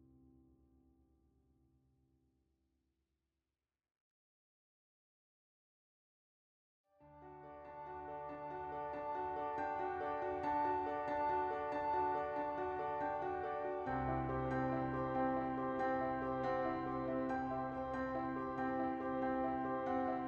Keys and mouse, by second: 0.0-2.0 shift+middle drag, 0.8 l, 2.8 Tab, 3.2 KP_1, 4.1 /, 6.3 middle click, 6.5 shift+middle click, 7.1 middle click, 9.4 middle click, 10.0-11.8 shift+middle drag, 10.3 shift+click, 10.7 l, 10.9 shift+click, 12.6 ctrl+i, 13.4 click, 15.3 Tab, 15.4 click, 15.9 click, 17.6 Tab, 17.9 shift+middle click, 19.0 3.